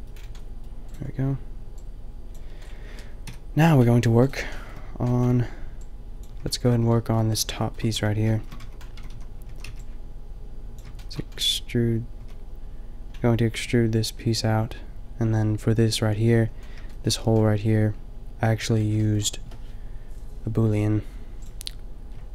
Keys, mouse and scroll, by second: 3.2 KP_5, 7.0-7.9 middle drag, 8.0 middle drag, 8.6 Tab, 8.9 a, 9.1 a, 9.4 a, 9.8 b, 12.2 a, 16.5 middle click.